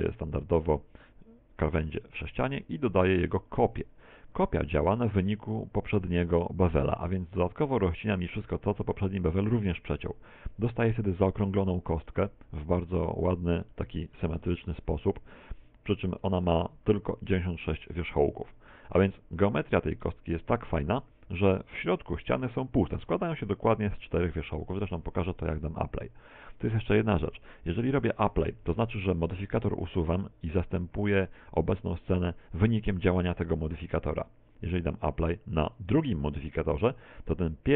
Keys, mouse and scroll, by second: 1.0 click, 7.2 click, 10.6-12.9 scroll up 5, 14.5 middle click, 15.4 middle click, 16.9-17.4 scroll down 3, 17.4 shift+middle click, 18.2 Tab, 20.0 Tab, 23.3 Tab, 24.1 Tab, 26.8 Tab, 28.5 Tab.